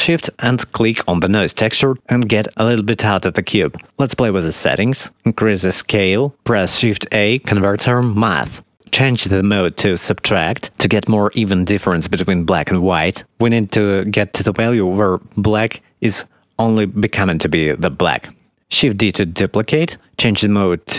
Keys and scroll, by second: 5.9 shift+a, 19.0 shift+d.